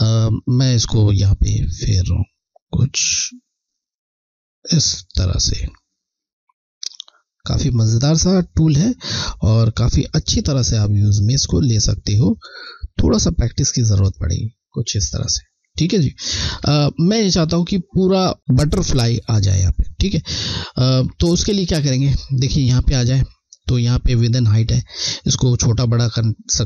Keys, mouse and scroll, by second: 16.5 ctrl+z.